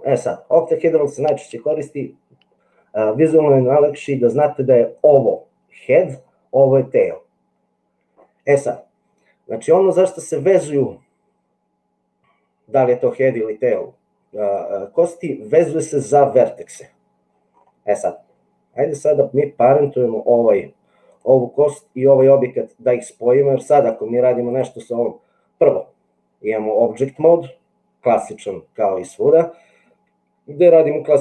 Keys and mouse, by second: 4.1 click, 4.9 click, 18.3 middle click, 23.8 click.